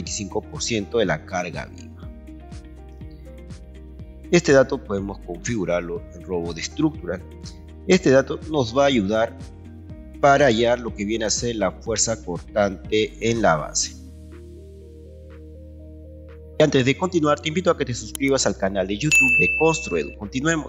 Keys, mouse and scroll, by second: 6.2 Escape, 9.2-10.4 ctrl+right drag, 11.7-13.1 ctrl+right drag.